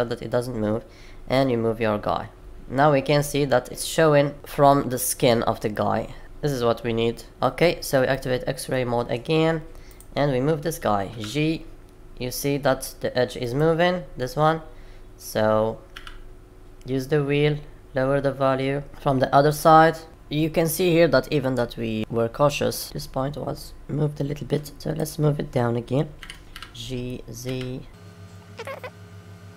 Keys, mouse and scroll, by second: 4.3 click, 4.6 middle click, 6.2 middle click, 8.1 click, 8.6 middle click, 9.8 click, 11.1 g, 15.8 g, 18.9 middle click, 19.4 click.